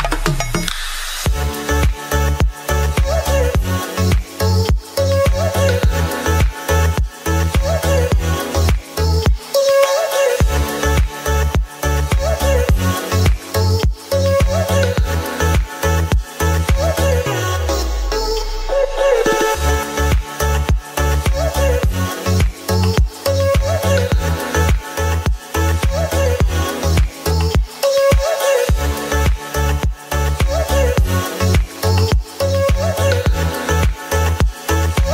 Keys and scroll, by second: 8.1 ctrl+j, 9.5 ctrl+j, 9.6 ctrl+e, 13.5 ctrl+g, 16.3-17.3 typing, 17.6 Return, 26.8 [, 30.7 space, 32.7 ctrl+z.